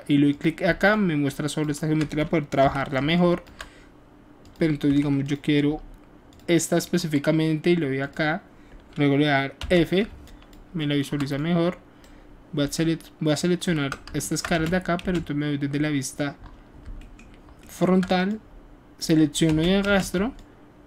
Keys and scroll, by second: 2.6 f, 4.9 q, 10.1 alt+f, 14.5 alt+shift+space, 19.5 space, 19.8 space.